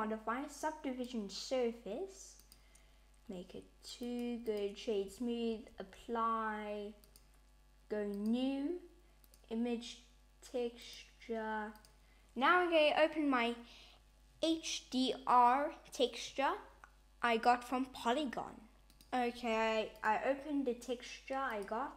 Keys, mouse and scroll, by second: 3.9 right click, 5.5 super+a, 6.9 click, 8.0 click, 9.1 click, 10.7 click, 19.8 click, 21.3 click.